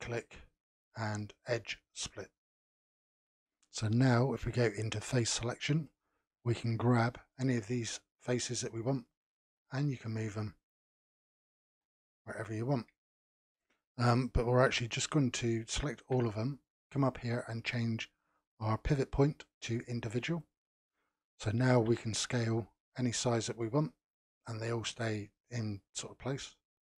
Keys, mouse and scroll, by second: 4.5 3, 5.7 click, 6.7 g, 8.0 click, 8.3 g, 9.4 click, 9.7 g, 11.3 click, 11.7 g, 15.9 a, 16.9-20.0 drag, 21.7 s.